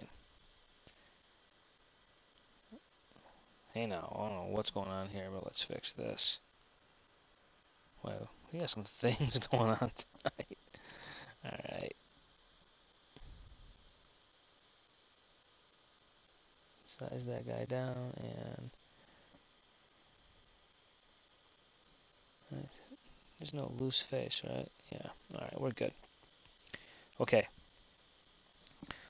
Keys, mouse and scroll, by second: 0.3 Tab, 3.3 `, 3.8 `, 4.3 KP_1, 5.3 Tab, 8.8 a, 10.6 b, 14.1 s, 19.4 g, 22.7 Tab, 23.3-26.1 drag.